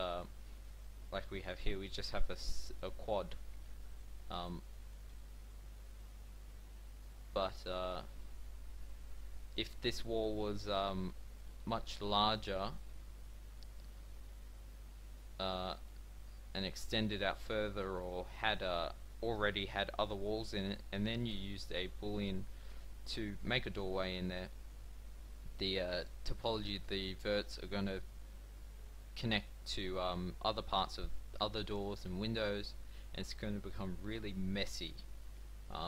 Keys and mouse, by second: 11.1-13.2 middle drag, 14.0 g, 23.0-24.8 middle drag.